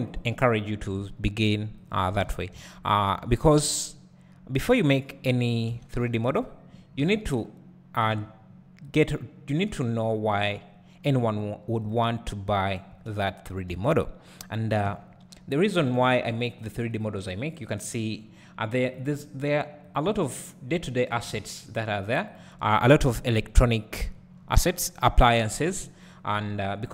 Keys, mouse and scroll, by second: 0.2 click, 1.0 g, 1.9 click, 2.2 alt+a, 2.6 `, 3.7 scroll up 1, 4.7 click, 5.9 g, 6.4 right click, 6.7-7.1 scroll up 1, 7.1 alt+a, 8.1 k, 13.1 space, 13.8 alt+a, 14.9 k, 20.2 space, 21.4 alt+a, 21.8 click, 24.0 KP_1, 25.5 ctrl+KP_3, 26.7-26.9 scroll up 1.